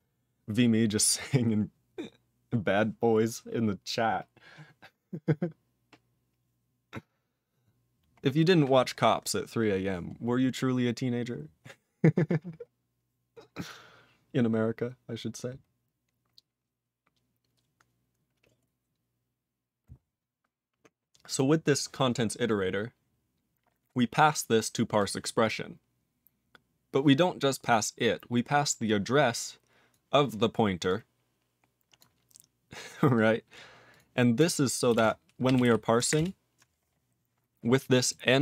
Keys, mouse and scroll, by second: 8.2-8.8 scroll down 4, 8.8-11.5 scroll up 5, 11.5 scroll up 7, 21.3 click, 22.5-23.9 scroll down 1, 23.9 click, 24.7 click, 25.0 click, 25.4 click, 27.6 click, 28.8 click, 29.9 click, 30.9 click, 32.0 click, 33.1 click, 33.9 click, 36.1 ctrl+Return, 38.0 click.